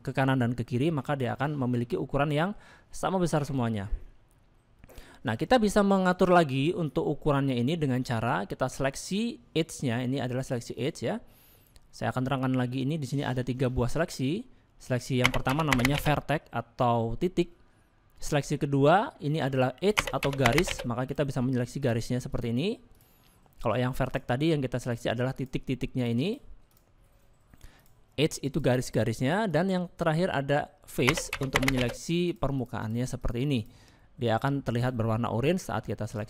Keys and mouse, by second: 0.4 middle click, 1.4-2.5 middle drag, 3.5 middle click, 4.8 middle click, 10.7 click, 13.8 click, 19.9 click, 21.1 click, 22.3 click, 24.1 click, 24.9 click, 25.9 click, 26.7 click, 27.8 click, 28.5 click, 28.8 click, 31.1 click, 31.8 click, 32.2 click, 32.8 click, 33.2 click, 34.0 middle click, 34.7 click, 35.2 middle click, 36.1 click.